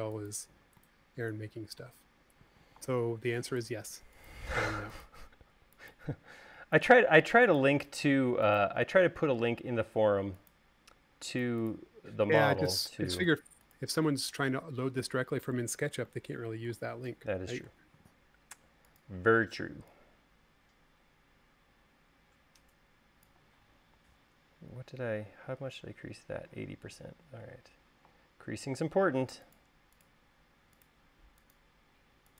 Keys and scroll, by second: 27.6 space.